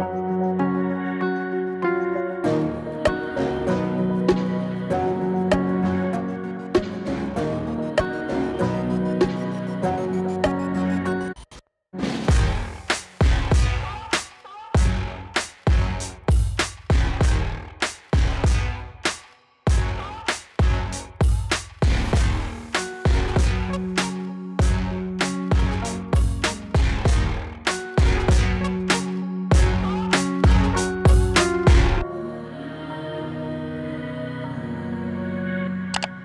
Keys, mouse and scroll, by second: 2.0 Return, 2.1 click, 4.3 Return, 6.2 click, 8.5 Return, 10.6-14.9 drag, 18.0 Return, 19.4 click, 20.3 Return, 21.8 click, 22.7 Return, 25.8-27.4 drag, 30.3 Return, 32.4 click, 34.0 Return.